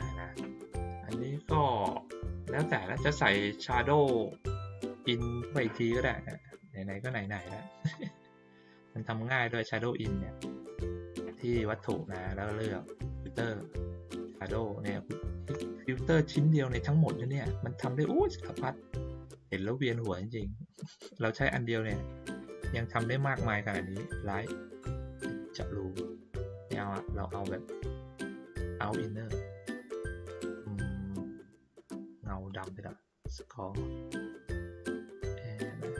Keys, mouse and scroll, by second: 5.6 click, 7.0 click, 7.7-8.3 ctrl+scroll up 4, 8.8 middle click, 10.0 click, 10.6 middle click, 11.5 ctrl+middle click.